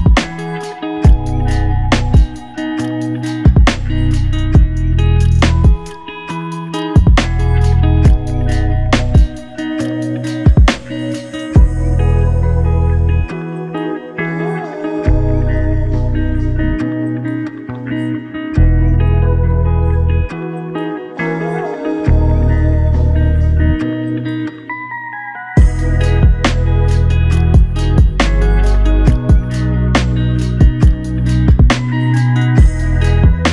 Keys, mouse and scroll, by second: 0.0 double click, 17.2 shift+click, 21.1 double click.